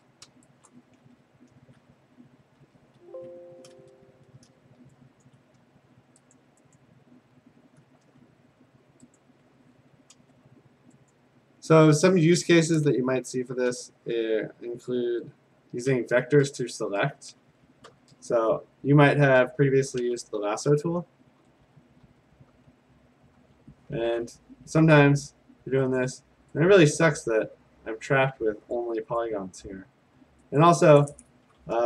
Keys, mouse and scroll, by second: 0.7 click, 1.0 ctrl+s, 2.7 ctrl+d, 3.3 Escape, 4.0-5.2 ctrl+d, 5.2 click, 6.4 click, 6.8 click, 9.2 click, 10.1 a, 11.1 click, 16.5-17.4 scroll, 17.9 p, 20.7-23.4 typing, 25.0 click, 26.0 click, 28.7 click, 29.2 click, 30.6 click, 31.1 click.